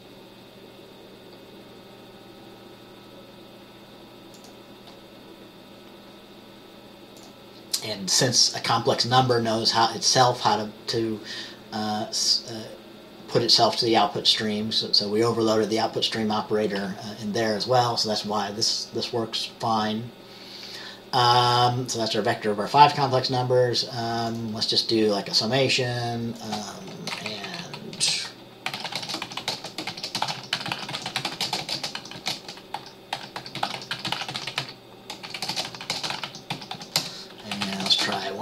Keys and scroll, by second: 27.4 Right, 27.6 Right, 28.1-38.4 Right, 28.1 Return, 28.8-38.4 typing.